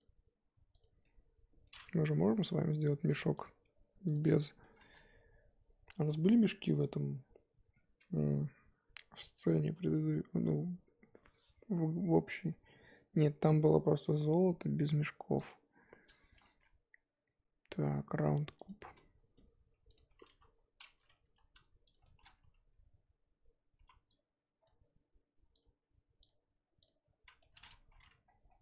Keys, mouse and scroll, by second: 0.0-0.4 middle drag, 1.0-2.3 middle drag, 2.3 KP_1, 4.0-4.4 drag, 4.4-18.7 shift+middle drag, 18.7 shift+a, 20.3 click, 20.5 scroll up 2, 21.2 g, 22.0 shift+middle drag, 22.2 scroll up 3, 22.4 Tab, 23.8 z, 24.6 click, 25.5 click, 26.8-27.2 drag, 27.2 z, 27.4-27.9 shift+middle drag, 27.9 g.